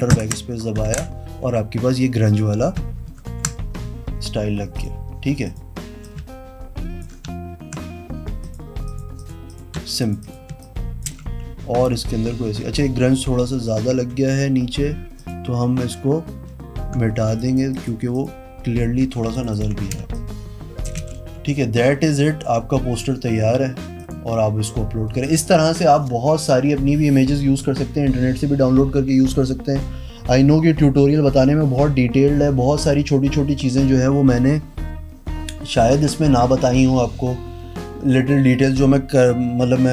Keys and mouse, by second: 0.3 alt+BackSpace, 1.0 ctrl+d, 3.3 ctrl+KP_Subtract, 5.0 click, 6.2-7.2 shift+drag, 8.6 click, 9.4 click, 9.7 click, 10.0 z, 10.2 click, 10.4 click, 10.7 space, 10.8 click, 11.4 v, 14.3 e, 15.4 click, 16.9 Caps_Lock, 17.6 click, 17.9 click, 18.3 click, 19.3 z, 19.5 alt+click, 19.7 alt+click, 20.2 space, 20.3 click, 21.2 v, 24.2 click.